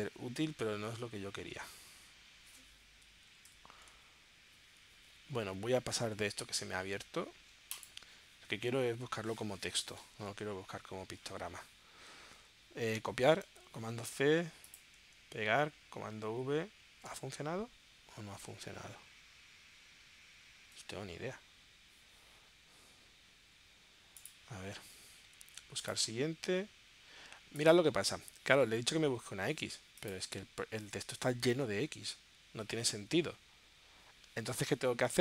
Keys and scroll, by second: 3.9 shift+super+p, 14.1 super+c, 16.1 super+v.